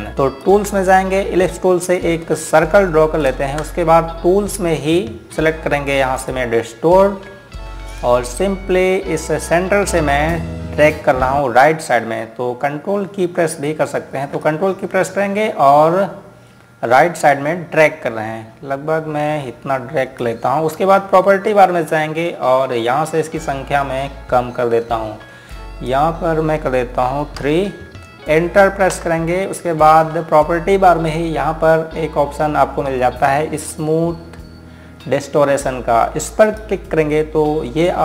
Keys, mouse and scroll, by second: 0.2 click, 3.4 click, 4.1 space, 4.6 scroll up 1.